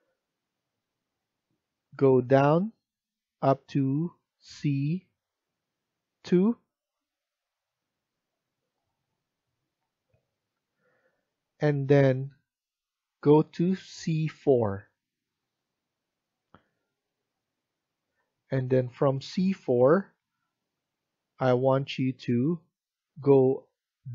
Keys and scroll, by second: 10.4 F1.